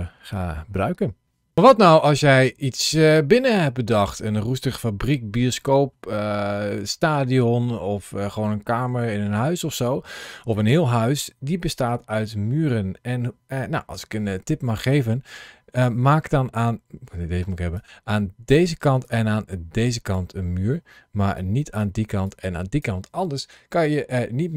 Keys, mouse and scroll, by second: 15.7 click, 17.4 ctrl+shift+a.